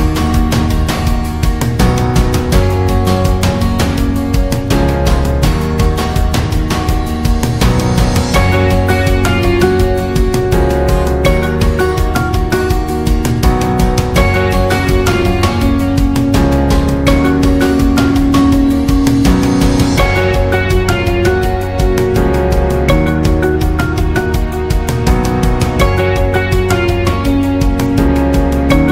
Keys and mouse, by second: 1.1 alt+right click, 1.7 right click, 2.0 middle click, 3.0 shift+right click, 3.3 g, 5.0 ctrl+r, 6.4 k, 9.6 alt+right click, 10.0 middle click, 10.7 g, 12.1 middle click, 12.9 right click, 13.6 g, 15.1 KP_3, 15.7 right click, 16.3 b, 17.7 alt+z, 18.2 w, 19.5 right click, 20.1 n, 20.7 click, 21.5 w, 23.0 alt+z, 23.4 shift+middle click, 24.6 alt+z, 28.5 shift+middle click.